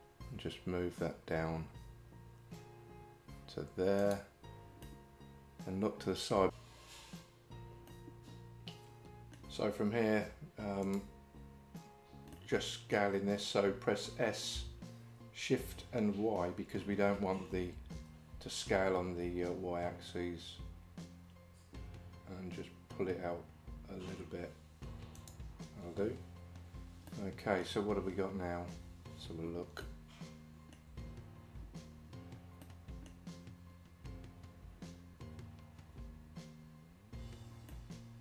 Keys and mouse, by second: 4.9-6.5 middle drag, 7.9-9.4 middle drag, 10.9 shift+click, 12.4 middle click, 15.7 shift+5, 27.1 middle click, 29.9 shift+middle click, 32.6 middle click, 37.7 middle click.